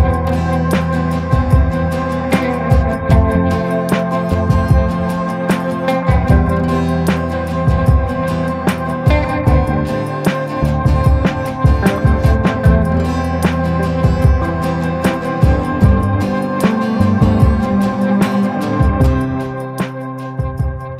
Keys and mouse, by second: 1.3 ctrl+i, 1.8 b, 3.1 b, 3.9 b, 4.7 b, 5.7 b, 6.5 b, 7.3 b, 8.4 b, 9.0 b, 10.0-11.5 drag, 11.9 a, 12.4 middle click, 13.6 middle click, 15.5 shift+middle click, 16.1-17.1 middle drag, 17.3 middle click, 17.6 middle click, 18.1-20.9 middle drag.